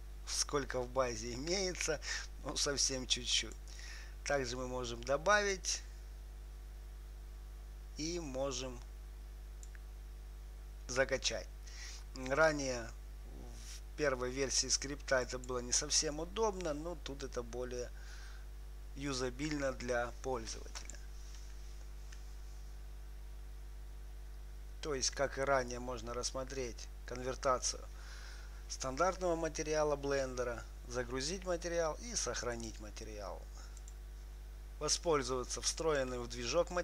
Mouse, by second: 3.2-5.1 drag, 6.0-11.3 drag, 15.7-17.7 drag, 21.1-23.1 drag, 33.1-36.0 drag.